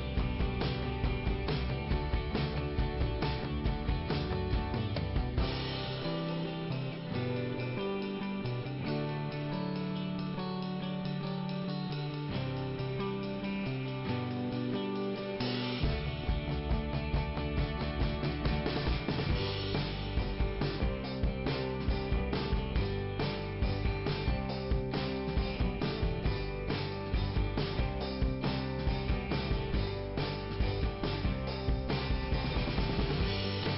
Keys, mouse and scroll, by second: 0.2 scroll down 2, 2.0 middle click, 4.0 click, 5.7 middle click, 7.7 click, 7.9 click, 12.8 click, 18.1 click, 18.2 click, 24.0 click, 31.4-31.7 scroll up 1.